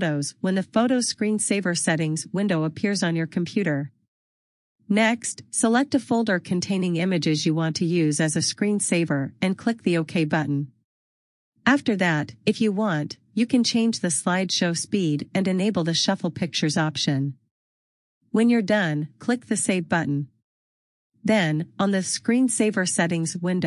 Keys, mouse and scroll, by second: 0.4 click, 3.1 click, 3.7 scroll down 1, 7.9-8.7 scroll down 1, 10.9 click, 11.1 double click, 11.6-11.9 scroll down 1, 12.9 click, 13.3-14.0 scroll down 1, 14.7 click, 21.2 click.